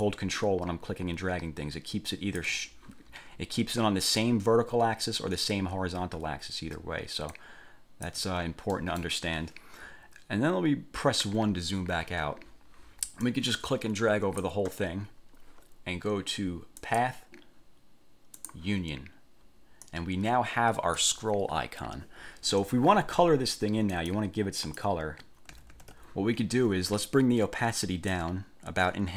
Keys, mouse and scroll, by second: 0.2-2.8 ctrl+drag, 6.6 ctrl+scroll up 2, 7.5 ctrl+click, 8.9 middle click, 11.4 1, 13.4-14.8 drag, 17.0 click, 18.6 click, 20.0-21.4 drag, 24.1 click, 24.8 click, 25.7 ctrl+z, 28.3-29.1 drag.